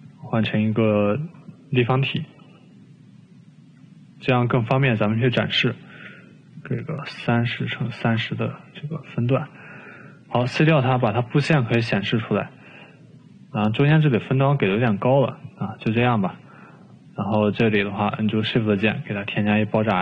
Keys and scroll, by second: 6.5-7.1 typing, 8.0 ctrl+c, 8.3 ctrl+v, 8.7 ctrl+v, 10.4-12.7 typing, 13.8-14.8 typing.